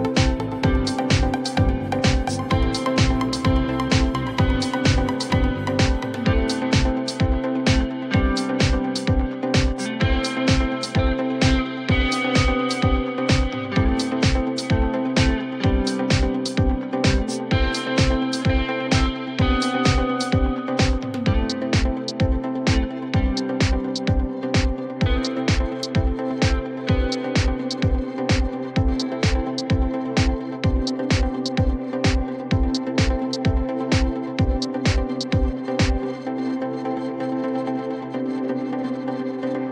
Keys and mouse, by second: 2.8-4.1 alt+drag, 4.8 alt+click, 5.5 alt+middle click, 6.0-11.1 alt+drag, 12.4-16.1 alt+drag, 16.8 alt+click, 19.1 alt+click, 20.1 alt+middle click, 20.6 alt+click, 24.3 click, 28.2-30.2 drag, 35.6-39.5 drag.